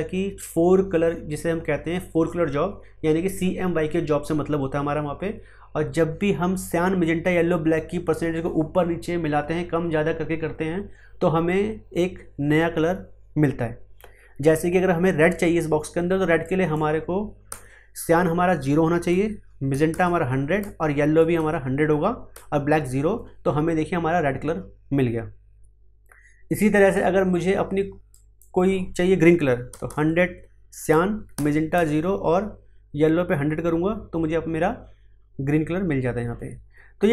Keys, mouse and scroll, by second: 16.4-19.1 drag, 19.1 Tab, 30.2 click, 30.9 Tab.